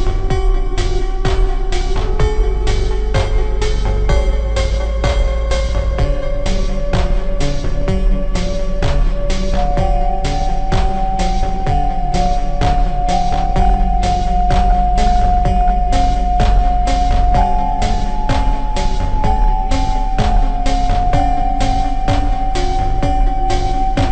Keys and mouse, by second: 2.3 e, 4.9 e, 6.1-8.4 drag, 6.2 middle click, 8.4 e, 9.8 e, 10.7 click, 14.5 e, 15.9 e, 16.7 e, 17.7 middle click, 17.9 middle click, 19.1 middle click, 19.7 e, 21.8 e, 23.3 e.